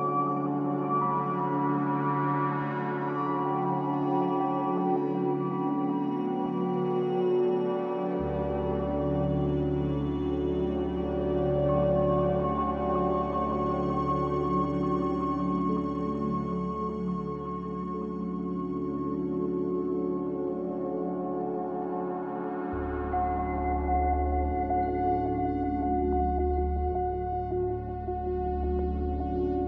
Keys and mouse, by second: 1.5-1.9 middle drag, 2.8 click, 4.2 Tab, 4.7 Tab, 5.2 click, 6.7 click, 7.2 click, 8.0 Tab, 8.6 Tab, 10.4 F4, 10.8 F4, 11.3 click, 12.4 g, 14.0 click, 14.4 click, 14.6 click, 15.2 click, 18.6-19.8 drag, 21.6-23.5 drag, 23.5 g, 27.3 click, 28.5-29.6 drag, 29.2 p.